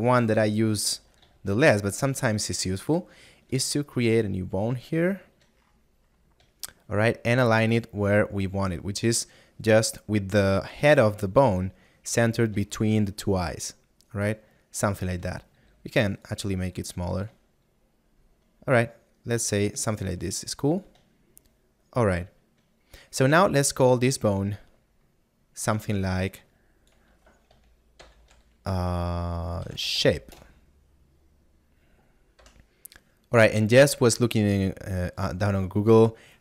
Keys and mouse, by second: 4.3 click, 6.8 middle click, 8.6 click, 13.0 middle click, 17.2 click, 17.9 middle click, 20.0 shift+click, 21.5 middle click, 26.5 click, 30.1 e, 35.0 click.